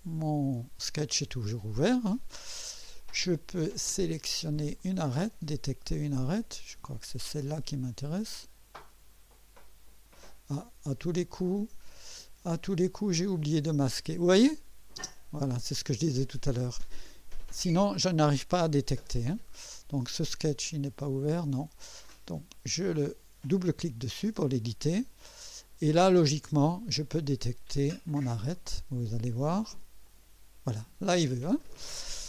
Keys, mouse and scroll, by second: 0.6 click, 4.8 click, 6.8 click, 8.3 click, 9.6 click, 11.2 click, 13.0 click, 13.9 click, 15.0 space, 21.0 click, 22.1 click, 23.6 click, 25.0 scroll up 1, 25.6-26.2 right drag, 28.5 click, 30.0 click, 32.0 scroll up 2.